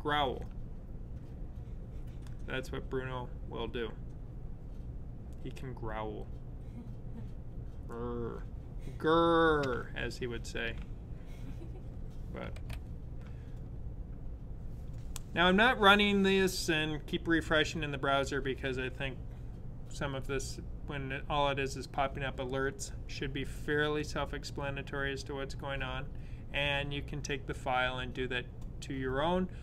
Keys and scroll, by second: 12.3 super+/.